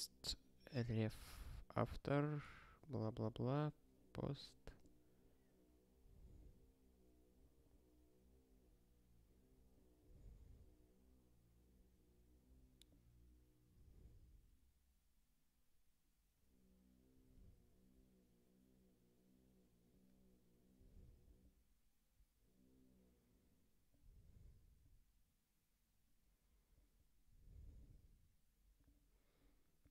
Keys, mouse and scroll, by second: 4.7 scroll up 1, 7.5 scroll up 1, 9.2-10.3 scroll down 1, 11.6 scroll down 1, 20.3-20.7 scroll down 1, 24.3 scroll down 1, 26.1 scroll down 1, 28.3 scroll down 1, 29.6 scroll down 1.